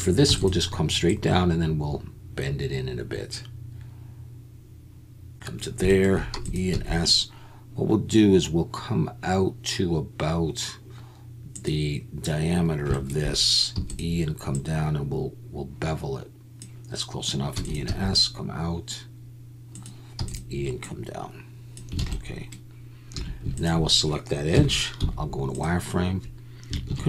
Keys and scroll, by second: 0.3 e, 6.3 e, 6.7 s, 13.7 e, 17.5 e, 17.8 s, 20.2 e, 22.0 alt+a, 23.1 2, 24.5 KP_1, 25.0 z, 26.9 ctrl+b.